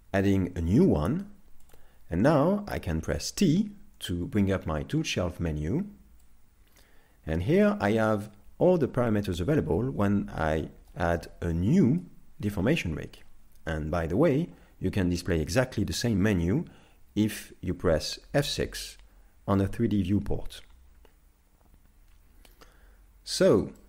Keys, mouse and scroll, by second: 0.2 shift+a, 3.4 t, 6.3 click, 10.4 middle click, 12.4-12.8 scroll, 12.8 middle click, 20.3 F6, 23.5 z.